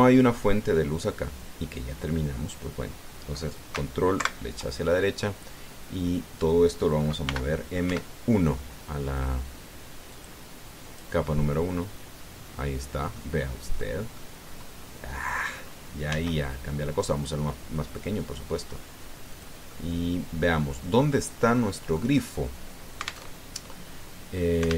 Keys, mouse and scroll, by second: 4.9 ctrl+Right, 8.1 m, 10.9 click, 11.6 click, 13.2-13.5 scroll down 2, 13.9-15.2 drag, 16.9 s, 20.0 click, 20.5-22.0 drag, 22.3 click, 24.1 alt+Tab.